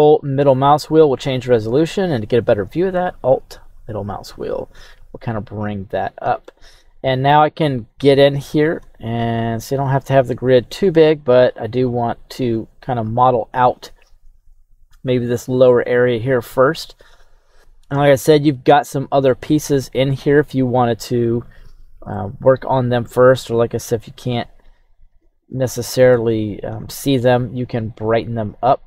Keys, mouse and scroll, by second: 5.2-6.2 scroll down 1, 13.0-14.0 scroll down 2, 19.2-19.5 scroll up 3, 24.0-25.1 scroll down 2, 25.1-25.7 scroll down 2, 27.4-28.8 scroll down 1.